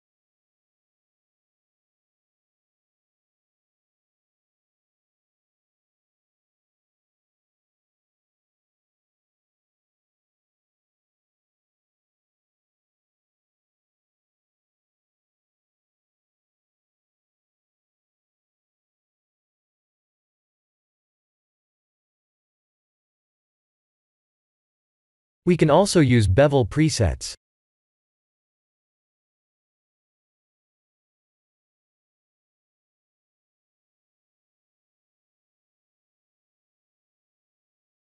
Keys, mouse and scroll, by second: 3.7-5.0 drag, 5.7 click, 7.4 click, 8.5-10.1 drag, 10.8-11.4 drag, 12.4 click, 14.5 click, 15.5 click, 17.5-21.3 middle drag, 22.3 click, 22.3 3, 23.8 ctrl+b, 28.3 click, 30.4-31.5 drag, 35.5-36.6 drag.